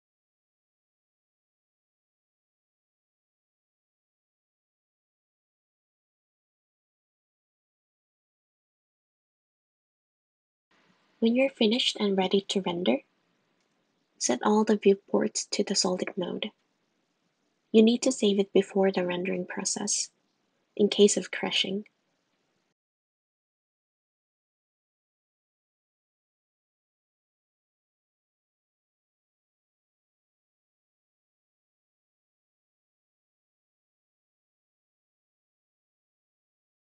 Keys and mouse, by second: 0.2 click, 0.9 click, 1.3 shift+d, 1.6 g, 2.0 r, 2.1 g, 3.4 shift+d, 3.5 g, 4.5 g, 5.1 click, 5.9 shift+d, 6.1 g, 8.9 `, 8.9 r, 9.5 r, 9.7 g, 12.5 middle click, 13.2 middle click, 13.9 middle click, 15.7 middle click, 19.5-22.0 middle drag.